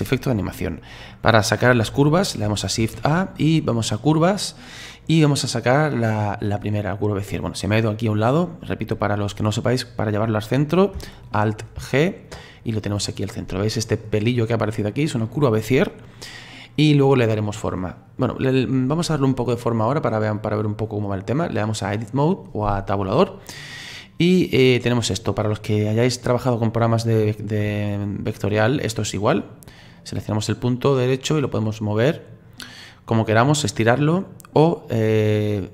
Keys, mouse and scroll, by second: 2.8 shift+a, 11.8 alt+g, 13.1-14.3 middle drag, 14.3-14.8 scroll up 5, 14.8-16.2 scroll down 3, 16.2-18.2 middle drag, 18.2 right click, 20.3-23.3 drag, 23.3-23.9 scroll up 1, 23.9-30.0 middle drag, 30.0 right click, 31.4 right click.